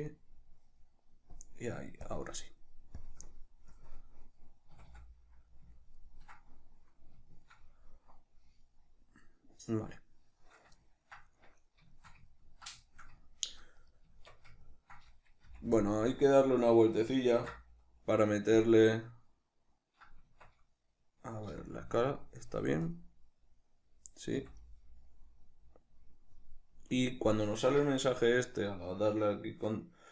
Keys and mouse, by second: 0.1-4.1 drag, 3.8 KP_Decimal, 4.1-13.8 middle drag, 4.8 a, 13.8 right click, 14.1 Tab, 14.7-15.9 ctrl+middle drag, 15.5 f, 15.9 click, 17.4 ctrl+d, 20.3 Tab, 21.5 n, 22.9 click, 24.4 n, 28.0 Tab.